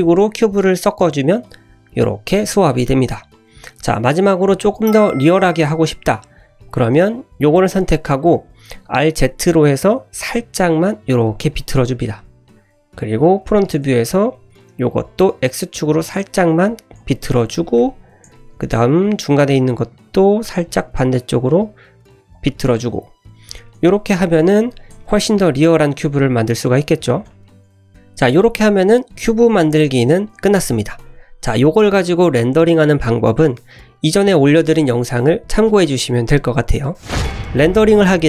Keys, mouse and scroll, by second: 0.4 scroll up 2, 1.0-1.5 scroll down 2, 1.2 middle click, 1.9 shift+middle click, 2.2-2.6 scroll up 1, 2.7-3.3 middle drag, 3.9 middle click, 4.4 `, 5.1 shift+middle click, 5.3 shift+scroll up 1, 5.6 click, 5.9-6.2 scroll up 2, 6.5 shift+middle click, 7.1-7.7 drag, 8.0 scroll down 1, 8.1 middle click, 8.9 r, 10.1 l, 11.6 click, 11.8-12.5 middle drag, 12.6 `, 13.1-13.7 drag, 13.9 shift+middle drag, 14.3 middle drag, 14.5 click, 14.8-15.2 scroll down 2, 15.2 r, 16.8 scroll up 1, 17.0 shift+middle click, 17.4 1, 17.7 `, 18.3 shift+middle click, 18.7 drag, 19.0 click, 19.9 r, 22.5 click, 23.4 scroll down 2, 23.6-23.9 middle drag, 24.3-24.9 scroll up 2, 25.0 shift+middle click, 25.4-25.7 scroll down 1, 26.0 middle drag, 26.9 scroll down 1, 27.2 shift+middle drag, 27.7 scroll up 1.